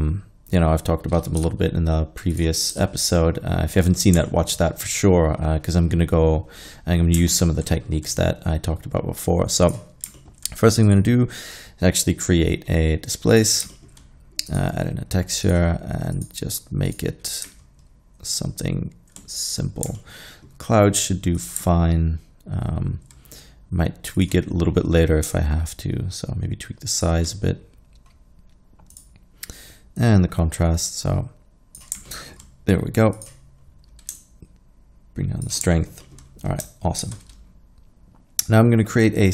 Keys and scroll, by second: 1.4 typing, 2.7 typing, 37.1 shift+a.